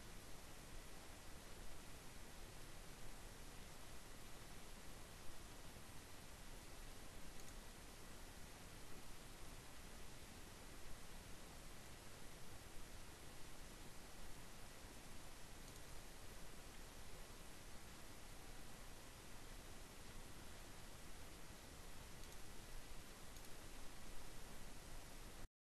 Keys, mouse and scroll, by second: 6.3 click, 15.2 click, 20.3-22.1 drag, 23.1 click.